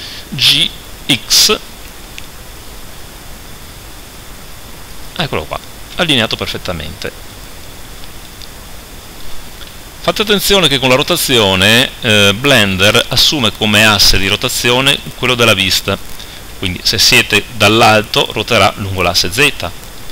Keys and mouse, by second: 0.4 g, 6.2 click, 7.6 click, 16.6 KP_7, 19.0 r, 20.0 click.